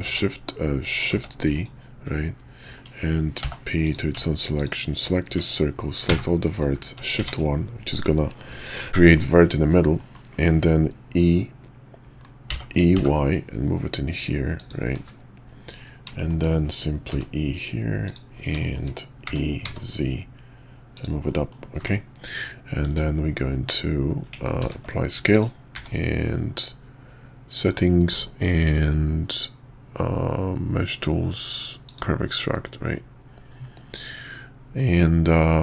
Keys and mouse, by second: 0.0 shift+s, 1.1 shift+d, 3.4 p, 4.2 Tab, 4.5 click, 5.3 Tab, 6.1 a, 7.1 shift+1, 9.0 middle click, 10.0 click, 12.5 e, 14.9 `, 15.7 KP_5, 16.2 shift+click, 17.1 e, 18.6 shift+click, 19.2 e, 21.2 click, 21.8 Tab, 22.9 q, 24.6 ctrl+a, 25.7 q.